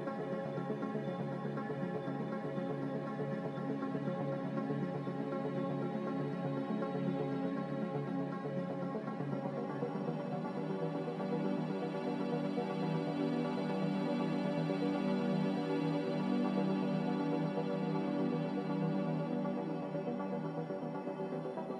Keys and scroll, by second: 16.9 a, 18.3 1.